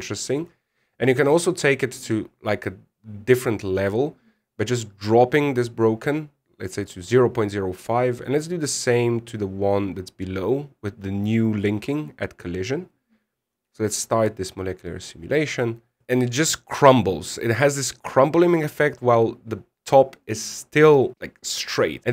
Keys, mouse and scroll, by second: 4.5 click, 13.0 scroll up 3, 13.6-14.3 scroll up 5, 14.3 click.